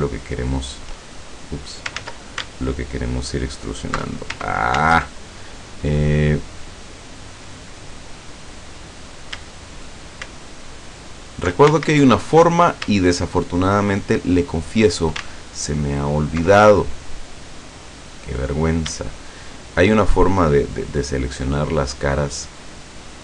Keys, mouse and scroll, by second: 0.4 shift+right click, 2.0 ctrl+z, 3.6 alt+shift+right click, 4.8 ctrl+z, 6.1 scroll up 2, 6.6-7.7 middle drag, 7.7 scroll up 2, 8.4 scroll down 2, 9.8 shift+middle click, 10.9 alt+shift+middle click, 11.8 ctrl+alt+shift+z, 13.0 shift+right click, 13.8 shift+right click, 15.9 ctrl+alt+right click, 18.4 right click, 19.4 shift+right click, 20.1 shift+right click, 20.7 shift+right click, 21.5 shift+right click, 22.4 shift+right click.